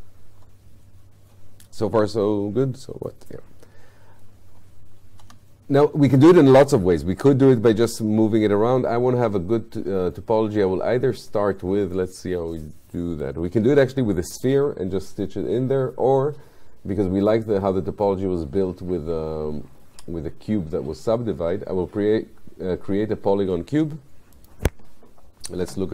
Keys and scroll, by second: 5.3 F8, 25.7 space.